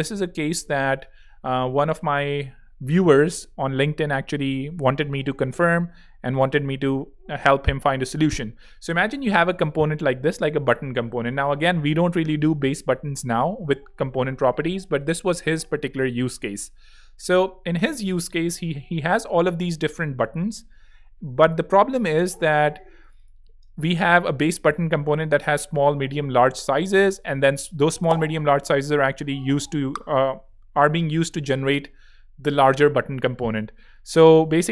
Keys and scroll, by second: 0.5 space, 23.7 space, 24.1 z, 27.7 alt+z, 28.1 alt+space, 28.6 space, 34.0 z.